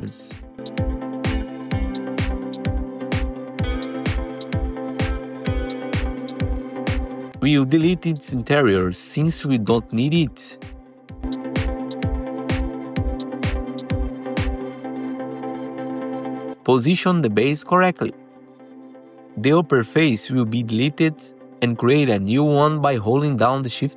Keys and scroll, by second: 5.6 F4, 8.6 alt+q, 9.6 4, 10.4 ctrl+t, 10.8 4, 12.8 Delete, 14.4 Delete, 15.2 3, 15.8 alt+q, 19.7 alt+q, 20.7 3, 21.2 3, 21.8 4, 23.2 Delete, 23.7 3.